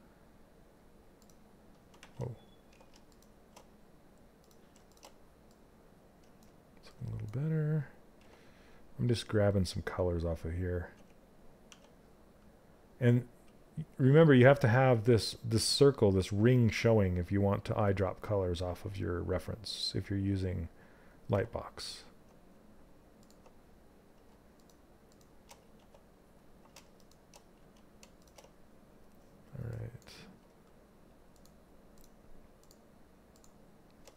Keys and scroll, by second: 1.5 ctrl+z, 7.6 z, 11.2 z, 14.4 z, 20.8 z, 25.1 ctrl+z.